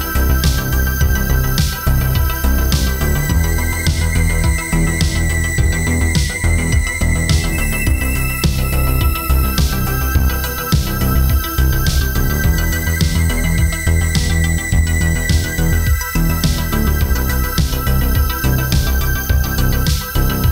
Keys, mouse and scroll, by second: 1.9 middle click, 3.2 click, 4.1 middle click, 4.5 scroll up 3, 4.8 shift+middle click, 5.1 middle click, 5.8 middle click, 6.8 shift+middle click, 7.7 ctrl+alt+KP_0, 8.7 click, 9.4 g, 10.6 click, 11.7 click, 14.2 i, 15.0 click, 17.5 click, 18.0 ctrl+z, 18.1 click, 18.5 ctrl+z, 18.6 click.